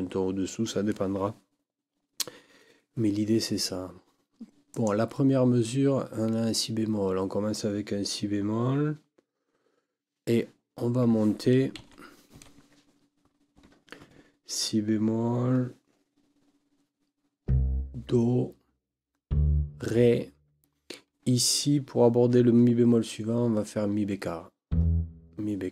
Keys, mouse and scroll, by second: 4.7 click, 11.8 Right, 12.3 Left, 13.5 n.